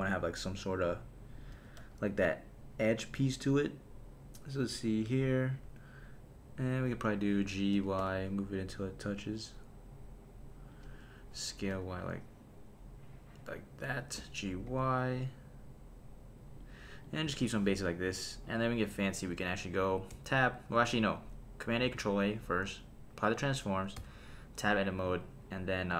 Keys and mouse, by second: 1.4 click, 1.5 g, 1.8 z, 3.4 click, 4.6 KP_3, 5.6 KP_1, 7.7 g, 8.0 y, 10.7 click, 11.3 s, 11.7 y, 13.9 click, 14.2 g, 14.7 y, 16.6 click, 18.5 click, 20.1 Tab, 20.6 Tab, 21.8 super+a, 24.0 Tab.